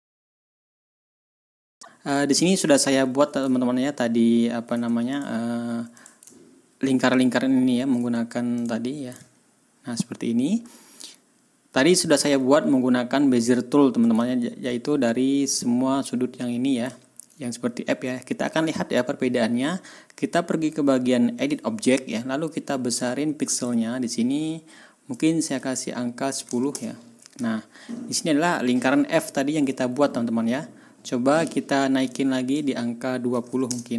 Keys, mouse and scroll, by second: 0.1 scroll up 2, 0.5 ctrl+scroll down 2, 0.5 ctrl+scroll up 4, 0.8 ctrl+scroll down 2, 1.0 ctrl+s, 1.5 ctrl+scroll down 2, 1.6 ctrl+middle click, 1.7 ctrl+scroll up 2, 2.2-2.5 ctrl+scroll up 2, 3.5 ctrl+scroll down 2, 4.2-4.5 ctrl+scroll down 2, 5.1 ctrl+middle click, 5.9 middle click, 6.3 ctrl+scroll up 2, 6.9 ctrl+scroll up 2, 7.6 ctrl+scroll up 2, 8.5 click, 9.1-9.6 ctrl+scroll down 2, 10.3 ctrl+scroll down 1, 11.7 ctrl+scroll up 1, 14.2-14.5 ctrl+scroll up 1, 16.9 ctrl+scroll down 2, 21.3 click, 23.5 click, 25.1 click, 26.3 KP_1, 26.5 KP_0, 26.7 Return, 27.9-28.3 ctrl+scroll down 2, 28.5 ctrl+scroll up 2, 29.2 ctrl+scroll down 2, 32.1 click, 33.3 KP_2, 33.4 KP_0, 33.6 Return.